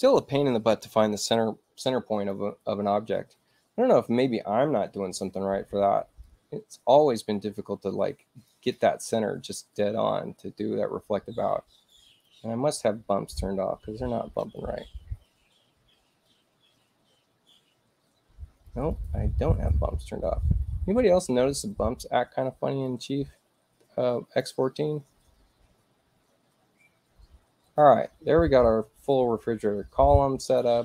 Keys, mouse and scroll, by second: 2.0 click, 6.2-8.6 drag, 8.4 right click, 9.6-12.2 drag, 11.8 right click, 14.2 F11, 16.2-19.0 drag, 18.5 right click, 20.5 F11, 22.8-24.3 drag, 27.5 click.